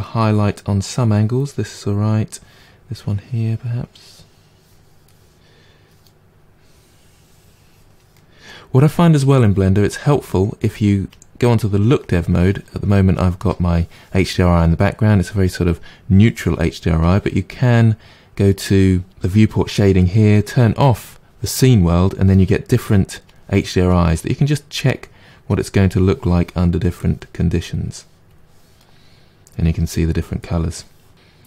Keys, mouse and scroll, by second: 2.9-5.1 drag, 5.1-6.6 middle drag, 6.6-8.1 drag, 8.1-11.1 middle drag, 11.1 click, 15.1-20.3 middle drag, 23.9-26.3 drag, 28.3 click, 28.7-31.4 middle drag.